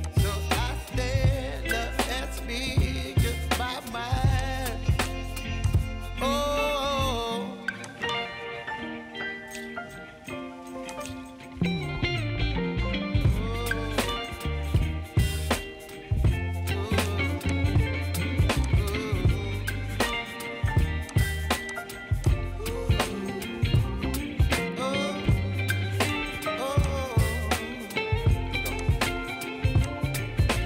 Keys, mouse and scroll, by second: 0.0-0.7 right drag, 0.7-2.5 middle drag, 4.4-4.7 right drag, 4.7-5.7 middle drag, 5.7 drag, 5.9-6.5 middle drag, 6.5-7.1 scroll up 1, 7.9-8.5 right drag, 8.5-9.1 middle drag, 9.1-9.5 scroll down 5, 9.5-10.9 middle drag, 10.9 click, 11.2-11.8 scroll up 4, 11.8-14.8 middle drag, 17.5-18.7 right drag, 18.7 click, 21.2-21.7 right drag, 21.7 click, 22.3 click, 22.6-25.6 middle drag, 26.8 click, 27.1-28.8 middle drag, 28.8 click, 29.9 shift+click.